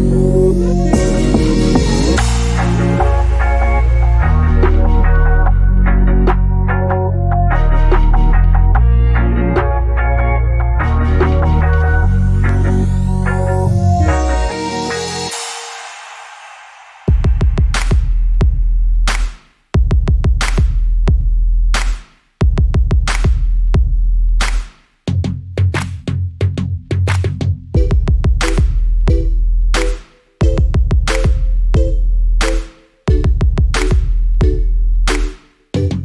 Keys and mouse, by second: 0.0 click, 2.5 click, 3.0 middle click, 3.3 shift+middle click, 3.9 space, 4.1 space, 4.2 click, 4.7 click, 5.3 click, 5.8 space, 6.3 click, 6.8 click, 6.8 space, 7.7 click, 8.8 click, 9.7 click, 10.0 click, 10.3 click, 10.9 click, 11.4 space, 12.8 space, 13.1 click, 14.0 click, 14.6 click, 15.6 click, 16.0 click, 16.2 middle click, 16.4 click, 17.0 space, 17.0 middle click, 17.4 middle click, 17.6 middle click, 18.3 click, 19.2 middle click, 19.8 KP_0, 20.8 space, 21.0 click, 21.0 space, 22.2 shift+d, 22.3 middle click, 22.5 shift+middle click, 22.6 click, 23.2 click, 24.1 click, 25.1 click, 28.8 click, 30.2 click, 31.2 click, 31.7 middle click, 31.9 middle click, 32.1 click, 34.4 middle click, 34.6 space.